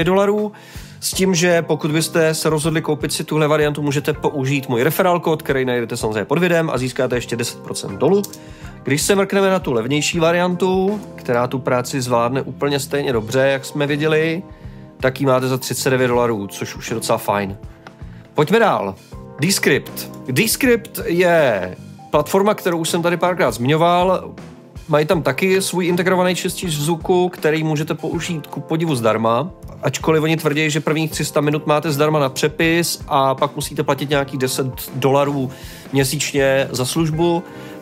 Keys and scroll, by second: 11.0 typing.